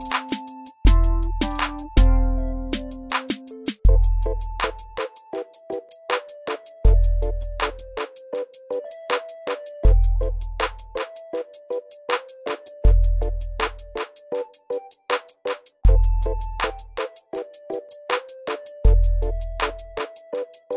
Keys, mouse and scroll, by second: 2.6 click, 3.0 ctrl+a, 4.4 click, 5.4 ctrl+d, 5.8-6.7 click, 6.9-7.8 shift+right drag, 11.4 click, 11.6 ctrl+a, 11.8-12.7 typing, 13.5 click, 17.0 ctrl+a, 17.3-18.2 typing.